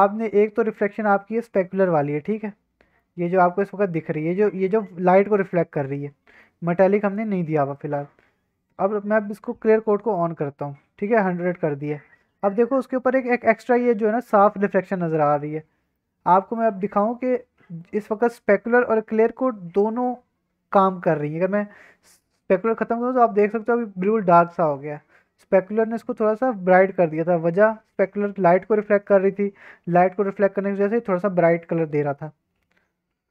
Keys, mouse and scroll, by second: 0.0 click, 1.5 middle drag, 1.8 scroll up 1, 2.0-3.0 middle drag, 3.1 scroll up 1, 3.3-4.3 middle drag, 4.5 middle drag, 4.7-5.3 scroll down 2, 5.3 middle drag, 5.6 scroll up 1, 5.9-6.4 middle drag, 7.0 middle drag, 7.3 scroll up 1, 7.7 middle drag, 9.4 click, 10.4 click, 12.4-16.0 middle drag, 16.5-17.8 middle drag, 22.0-26.9 drag, 29.4-29.8 scroll up 1, 29.9-30.4 scroll down 2, 30.7-31.8 scroll up 1.